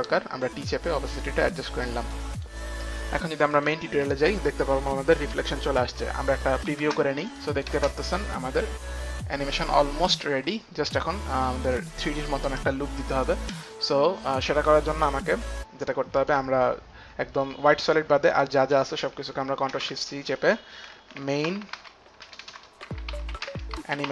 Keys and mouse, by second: 0.3 click, 2.5 click, 3.0 click, 3.0 t, 3.7 click, 6.9 click, 7.0 space, 7.6 click, 7.6 space, 11.8 space, 11.9 click, 16.4 click, 18.2 click, 18.5 shift+click, 19.7 shift+click, 19.9 ctrl+shift+c, 19.9 shift+click, 21.5-24.1 typing, 21.7 shift+click.